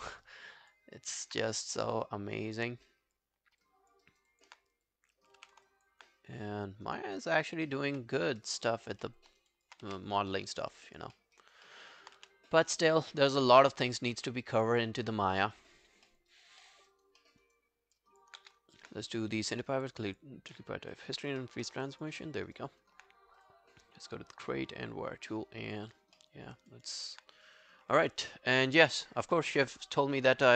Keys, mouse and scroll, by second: 0.3 alt+right click, 0.5 alt+click, 1.0 alt+click, 3.7 alt+click, 4.1 alt+right click, 4.3 alt+click, 5.4 e, 5.7 alt+click, 8.2 scroll down 2, 8.4 alt+click, 8.7 alt+right click, 9.1 alt+middle click, 9.3 alt+right click, 9.5 alt+click, 9.9 w, 10.3 alt+middle click, 10.6 alt+right click, 10.9 alt+click, 11.2 alt+middle click, 11.4 alt+right click, 11.7 alt+middle click, 12.2 w, 12.7 right click, 14.1 scroll down 2, 14.5 alt+click, 14.8-15.4 alt+scroll down 6, 15.2 alt+middle click, 15.4 alt+right click, 15.6 alt+click, 16.1 alt+middle click, 16.3 alt+right click, 16.7 alt+middle click, 16.9 alt+right click, 17.2 alt+middle click, 17.5 alt+right click, 17.8 alt+scroll down 3, 18.0 alt+click, 18.4 q, 19.8 double click, 20.1 double click, 21.1 click, 21.4 alt+middle click, 21.7 alt+right click, 21.9 alt+click, 22.2 alt+middle click, 22.5 alt+right click, 26.2 alt+middle click, 26.5 alt+scroll down 1, 26.7 alt+click.